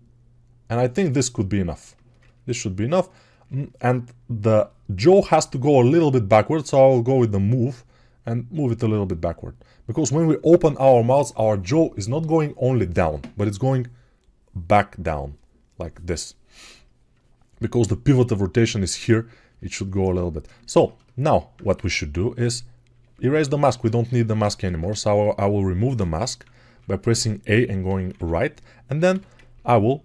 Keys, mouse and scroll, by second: 22.8 a, 24.2 a, 26.0-28.9 typing.